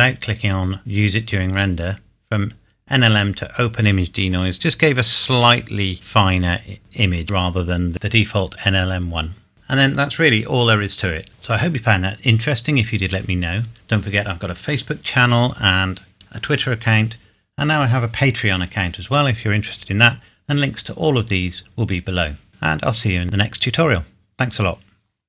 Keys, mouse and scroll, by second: 1.5 click, 4.3 click, 5.9-6.8 scroll up 1, 7.3-7.7 scroll down 1, 9.5-10.5 scroll down 1.